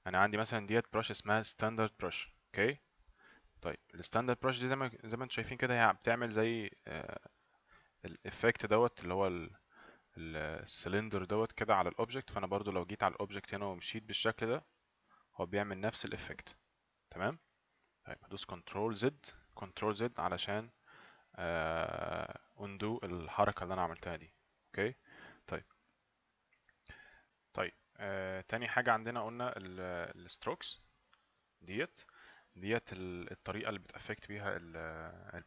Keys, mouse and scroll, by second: 12.9 click, 13.5 click, 23.3 z, 30.1 click, 32.3 click.